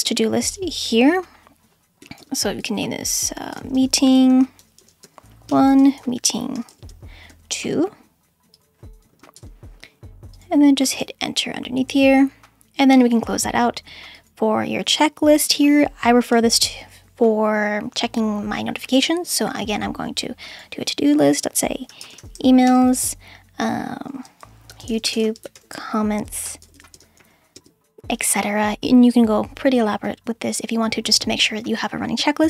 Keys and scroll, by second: 2.2-7.3 typing, 9.0 BackSpace, 9.3 shift+m, 10.9 Return, 16.3 /, 21.6-22.8 typing, 24.4-27.7 typing.